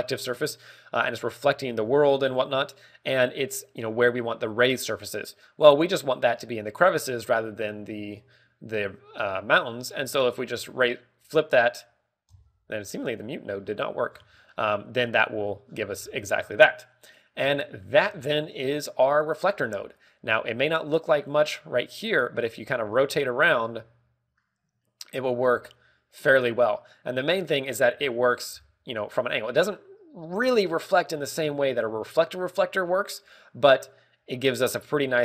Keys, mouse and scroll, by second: 9.0 click, 11.1 g, 12.6 click, 13.3 m, 14.0 click, 14.4 scroll up 1, 15.0 scroll down 2, 15.4 middle click, 15.4 scroll down 3, 16.6-17.1 scroll down 8, 19.8 click, 20.4 scroll down 2, 20.8 middle click, 21.6 shift+middle click, 23.5 scroll up 3, 23.8 middle click, 24.6 click, 24.6 scroll down 2, 25.8 ctrl+middle click, 27.8-28.3 scroll down 2, 28.1 middle click, 28.7 click, 28.7-29.0 scroll down 2, 28.9 click, 29.0 shift+middle click, 29.5 scroll up 5, 30.0 middle click, 33.3 scroll down 2, 33.7 middle click, 34.9 middle click.